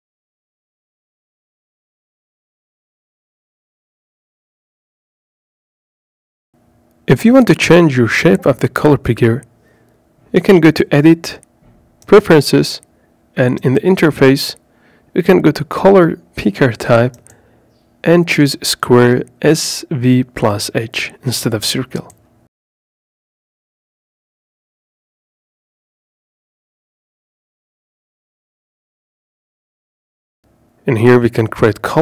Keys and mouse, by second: 3.2-4.7 drag, 5.7-9.0 drag, 10.7-12.0 drag, 20.3-26.2 middle drag, 31.8 click.